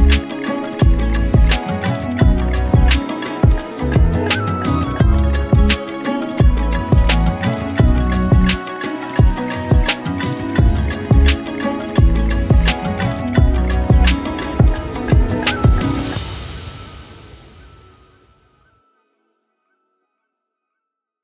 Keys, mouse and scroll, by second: 0.0-2.0 typing, 0.0 ctrl+z, 0.2 ctrl+z, 1.4-1.7 drag, 3.1 click, 3.4 g, 3.8 drag, 3.9 g, 4.2 g, 4.4 click, 5.4 click, 5.5 g, 6.1 g, 7.0 e, 8.1 KP_7, 8.3-8.8 scroll down 14, 8.8-9.4 scroll up 16, 8.9 shift+middle click, 9.7-10.1 middle drag, 10.1 Tab, 10.3 z, 11.3 right click, 12.1-13.1 drag, 13.1 Tab, 13.4 middle click, 13.7 drag, 14.0-15.0 middle drag, 15.5 g, 16.7 click, 16.9 g, 17.5 click, 17.9 shift+click, 18.1 g, 19.6 click, 19.7 g, 20.0-20.4 middle drag, 20.4 click, 20.6 KP_3, 21.0-21.2 ctrl+z.